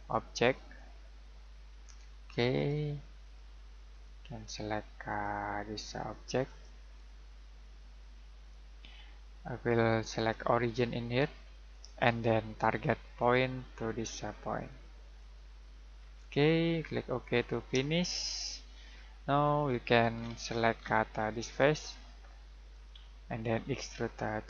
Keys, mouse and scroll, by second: 15.9 scroll down 1, 16.1-17.2 scroll up 1, 17.2 click, 18.1 shift+middle click, 19.8 scroll down 1, 22.7 click.